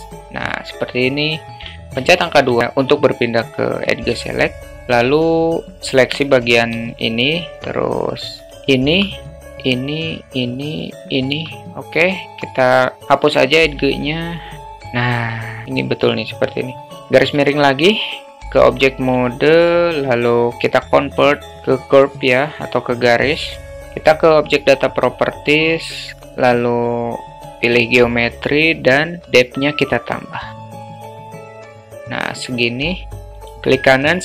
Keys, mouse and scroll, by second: 1.8 alt+middle click, 2.6 alt+middle click, 4.3 alt+middle click, 5.1 middle click, 5.7 click, 6.1 alt+middle click, 7.1 shift+click, 7.6 alt+middle click, 8.6 shift+click, 9.2 alt+middle click, 10.8 shift+click, 12.2 x, 14.1-15.6 alt+middle drag, 17.2 /, 18.6 Tab, 19.3 alt+middle click, 21.5 right click, 23.7 shift+middle click, 24.5 click, 27.2 click, 29.9 click, 30.4 click, 31.2 click, 32.6 click.